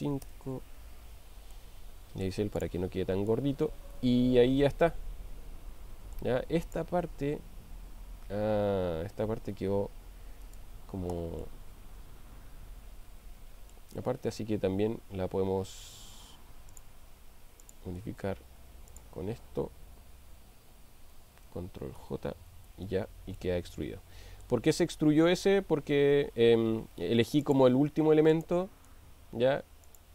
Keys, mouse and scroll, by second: 1.5-2.5 middle drag, 3.4-6.3 middle drag, 6.7 click, 9.6 g, 10.4 right click, 11.8-13.7 middle drag, 16.7 click, 17.7 click, 22.0 ctrl+j, 23.4-24.6 middle drag, 26.0 ctrl+z, 27.4 click, 28.4 click, 29.9 shift+click.